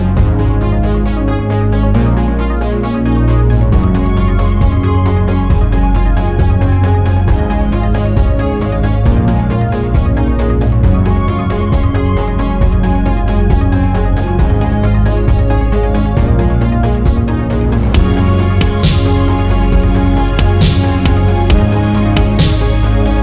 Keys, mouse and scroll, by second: 4.1 click, 5.3 click, 6.6 click, 7.7 click, 8.7 click, 9.8 click, 10.5 click, 11.8 click, 12.3 click, 14.7 click, 16.3 scroll up 2, 16.7-17.1 scroll down 3, 18.4-20.7 ctrl+drag, 20.9 ctrl+right click, 22.1 alt+click, 23.1 alt+shift+middle click.